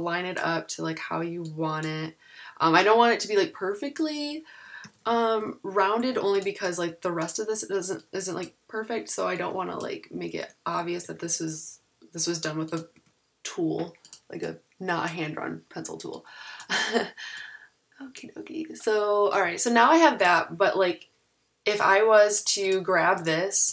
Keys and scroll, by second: 4.8 super+=, 4.8 super+-, 6.0 a, 10.3 super+z, 11.1 super+=, 12.9 a.